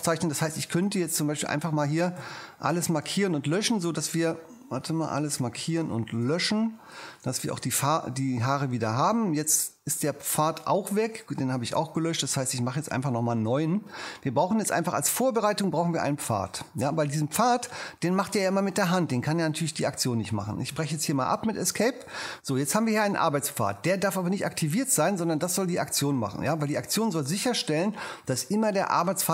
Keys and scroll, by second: 2.2 super+a, 3.0 super+BackSpace, 5.6 super+a, 6.2 super+BackSpace, 6.9 BackSpace, 7.4 super+d, 12.0 shift+p, 20.7 ⟲.